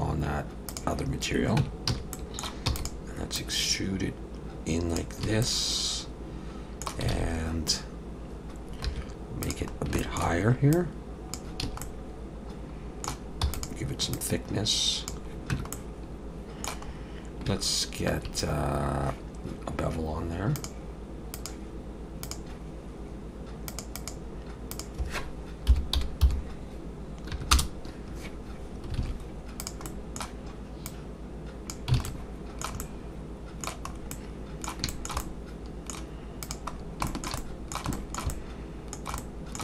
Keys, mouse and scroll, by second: 1.6 Tab, 1.9 a, 2.1 middle click, 2.7 e, 3.4 click, 5.2 a, 5.4 middle click, 7.1 alt+a, 8.9 2, 9.4 click, 9.8 scroll down 1, 10.0 shift+middle click, 10.7 click, 11.6 a, 11.8 middle click, 13.4 e, 14.1 click, 15.5 Tab, 15.7 middle click, 16.9 scroll up 1, 20.6 click, 21.4-25.9 click, 29.0 alt+a, 29.6 click, 29.8 middle click, 30.9 click, 32.0 alt+a, 32.0 alt+middle click, 32.8 middle click, 33.9 scroll up 2, 34.1 middle click, 34.9 shift+middle click, 35.2 middle click, 36.4 click, 36.7-37.0 scroll down 2, 37.1 shift+middle click, 37.4 middle click, 37.9 shift+middle click, 38.3 middle click, 39.2 middle click.